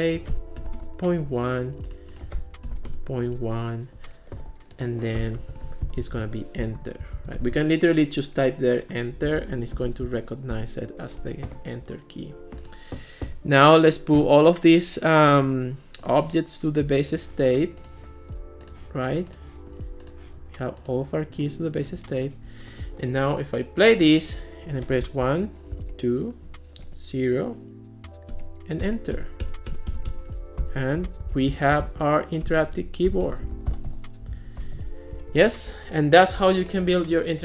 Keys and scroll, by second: 0.6 ., 0.8 Return, 2.4-3.4 typing, 5.3-6.7 typing, 7.2 super+c, 7.4 Return, 9.2-10.6 typing, 25.1 1, 25.8 2, 26.8 0, 28.3 Return, 30.4-35.1 typing.